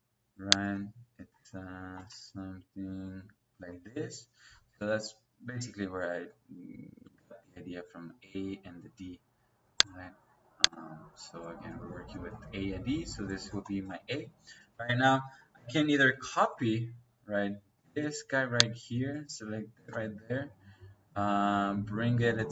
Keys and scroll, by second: 0.6 space, 14.5 Escape, 15.7-16.4 typing, 19.7 space.